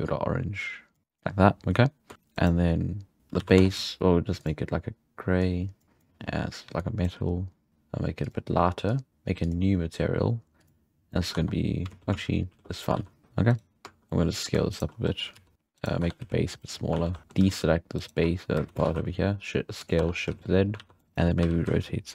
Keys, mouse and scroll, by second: 0.1 click, 1.0 click, 1.5-2.1 scroll down 1, 2.1-3.2 shift+right drag, 3.2 z, 3.4 alt+a, 3.6 Tab, 3.7 z, 4.4 click, 6.8-7.7 drag, 7.7-8.2 scroll down 2, 8.2 drag, 9.4-11.1 drag, 11.1 middle click, 11.3 Tab, 11.9 ctrl+z, 12.3 ctrl+z, 12.7 ctrl+z, 12.9 alt+a, 13.2 shift+middle drag, 13.5-14.0 right drag, 14.0 scroll down 1, 14.0-14.7 middle drag, 14.7 shift+right click, 14.9-15.3 scroll down 4, 15.3 s, 15.5 g, 15.8 right click, 16.0 Tab, 16.2 z, 17.0 alt+a, 17.1 scroll up 1, 17.2 shift+middle click, 18.0 alt+shift+right click, 18.6 s, 20.0 Tab, 20.1 scroll down 5, 20.3 z, 20.8 alt+a, 21.0 middle click, 21.0-21.5 shift+right drag, 21.4 r.